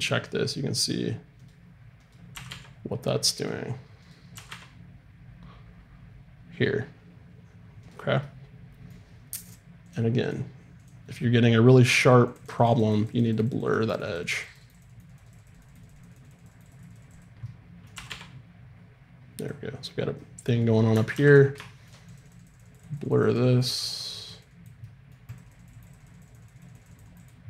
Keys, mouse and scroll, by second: 2.0-5.3 right drag, 2.3 r, 4.3 r, 8.2-10.9 middle drag, 10.9-12.0 drag, 11.6 middle click, 12.3-18.8 drag, 17.4-19.1 middle drag, 17.9 r, 21.1 alt+r, 22.1-24.6 drag.